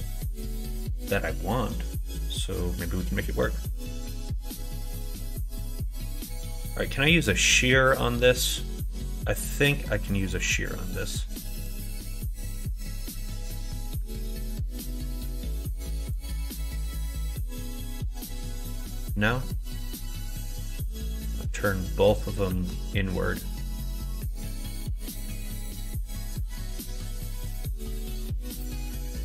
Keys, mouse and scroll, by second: 0.4-1.7 drag, 1.7 right click, 2.1 middle click, 2.2 click, 2.3 right click, 2.7 scroll up 1, 2.7 middle click, 3.1 middle click, 3.7 scroll up 1, 3.8 middle click, 4.2 scroll up 1, 5.2 scroll up 1, 5.2 middle click, 5.8 scroll up 1, 5.8 middle click, 7.0 scroll up 1, 7.1 middle click, 7.3 scroll down 1, 10.1 click, 10.7 scroll up 1, 10.7-11.7 middle drag, 12.6-13.9 drag, 14.1 ctrl+z, 15.2 click, 16.3 ctrl+z, 17.5 click, 19.4 scroll up 1, 19.6 middle click, 20.7-22.4 drag, 22.5 ctrl+z, 24.1 click, 25.0 ctrl+z, 25.6 click, 26.4 ctrl+z, 26.7 middle click, 27.9 middle click, 28.7 middle click.